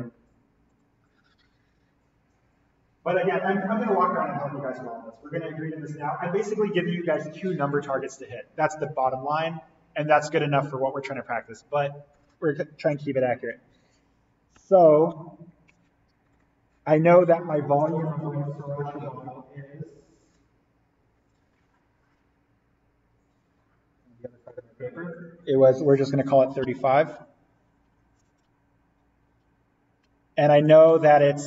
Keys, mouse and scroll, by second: 1.1 click, 10.8 click, 16.2 click, 16.3 ctrl+z.